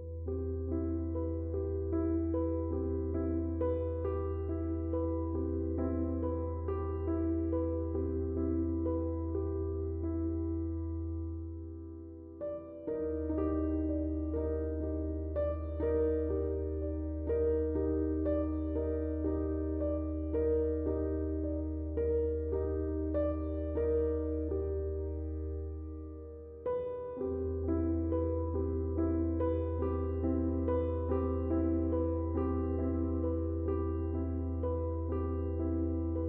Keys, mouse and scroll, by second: 2.4 space, 2.5-9.3 drag, 9.8 space, 10.7-12.6 drag, 12.6-14.3 shift+drag, 18.4-20.3 drag, 20.3-24.7 shift+drag, 24.7-29.9 shift+drag, 26.3 typing, 29.9-32.0 shift+drag, 34.7 typing, 35.0-36.2 drag.